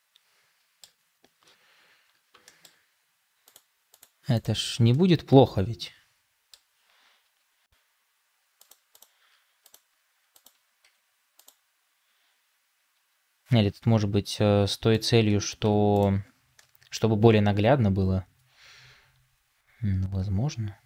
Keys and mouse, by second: 2.3 shift+middle click, 4.8-6.5 middle drag, 7.1 r, 10.7 Tab, 12.8 r, 15.5 Tab, 16.5-20.8 middle drag.